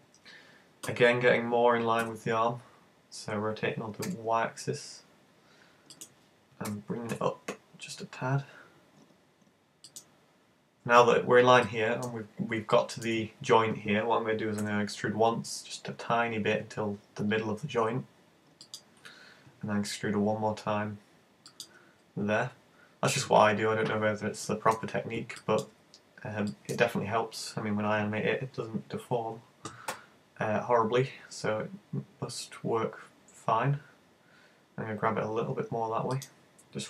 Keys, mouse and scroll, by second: 0.9 r, 6.1 click, 6.7 g, 10.0 click, 11.1 scroll up 5, 11.7 shift+middle click, 12.2-12.7 scroll up 2, 12.7 shift+middle click, 14.7 e, 18.8 click, 19.6 e, 21.6 click, 22.5-23.3 scroll down 4, 23.5 scroll down 4, 24.5 shift+middle click, 25.4 shift+middle click, 25.9-26.5 scroll up 2, 26.5 shift+middle click, 29.9 e, 36.2 click.